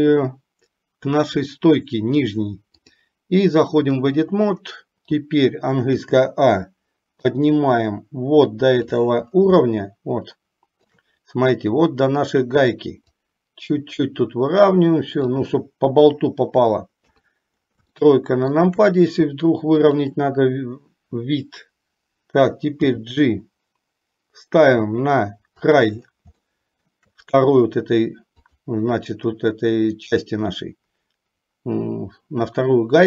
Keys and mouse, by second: 2.9-4.2 drag, 6.2 a, 7.3-9.0 drag, 9.9-11.1 shift+middle drag, 13.2-15.3 drag, 17.1 KP_3, 18.2 shift+middle click, 19.8 click, 23.0 g, 26.6 shift+middle click, 28.6 click.